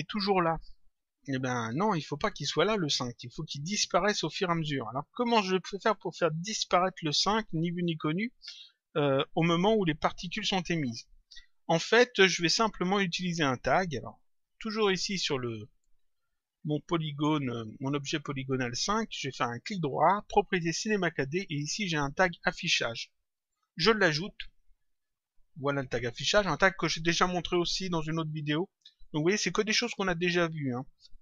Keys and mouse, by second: 5.8 click, 12.7 click, 14.3 click, 19.5 right click, 24.4 click, 25.7 click.